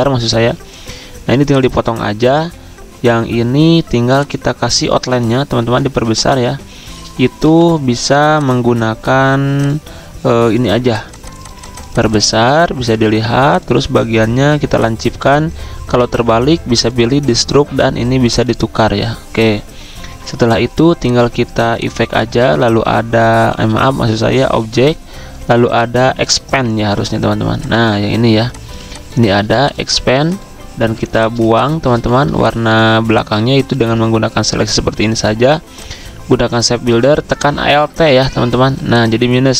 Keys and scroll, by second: 7.2 v, 28.2 z, 29.2 v, 30.8 z, 31.9 v, 33.7 ctrl+z, 36.2-37.0 typing, 38.1 ctrl+z.